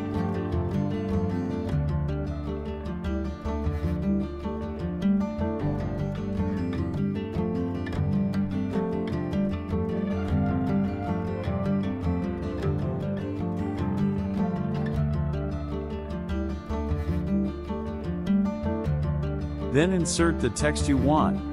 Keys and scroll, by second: 19.7 ctrl+v.